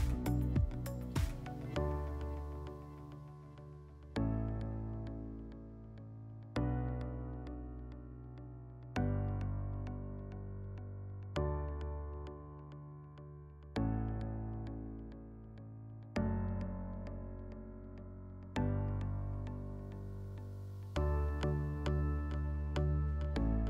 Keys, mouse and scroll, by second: 0.1-1.6 drag, 1.7-2.7 drag, 3.6 click, 4.3 click, 13.5 click, 14.6 click, 15.5 click, 15.7 click, 16.8 click, 17.0 click, 18.0 click, 18.2 click, 19.9 click, 20.1 click, 21.8 click, 22.0 click.